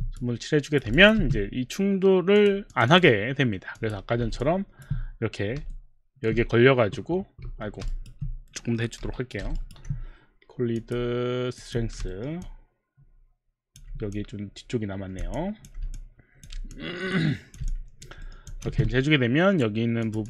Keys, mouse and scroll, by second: 0.6 click, 0.9 alt+click, 1.2 alt+click, 1.2 w, 2.3 click, 2.7 click, 2.9 click, 3.6 click, 3.8 click, 4.4 alt+click, 5.7 alt+middle click, 7.5 Escape, 7.9 alt+right click, 9.0 y, 9.6 alt+right click, 10.8 click, 11.6 click, 12.2 alt+middle click, 12.4 alt+click, 13.0 alt+click, 14.2 click, 15.4 alt+click, 16.0 alt+click, 16.8 alt+click, 18.2 alt+middle click, 18.5 alt+click, 18.7 alt+click, 18.7 alt+middle click, 18.7 w, 20.1 click.